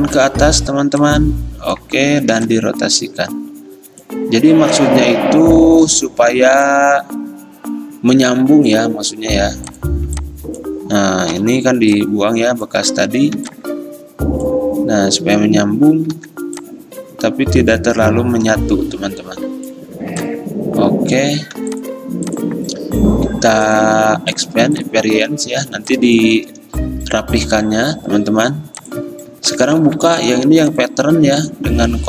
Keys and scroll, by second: 2.4 r, 6.0 v, 11.4 Delete, 13.5 r, 16.2 v, 20.2 r, 21.7 v, 25.8 ctrl+alt+2.